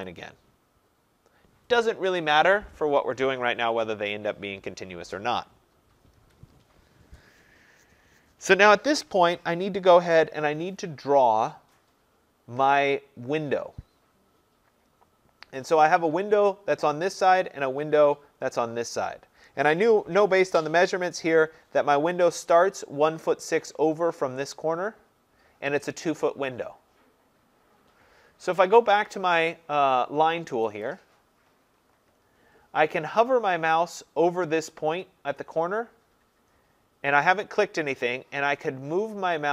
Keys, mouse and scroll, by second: 0.1 click, 6.2 Escape, 30.9-36.0 drag.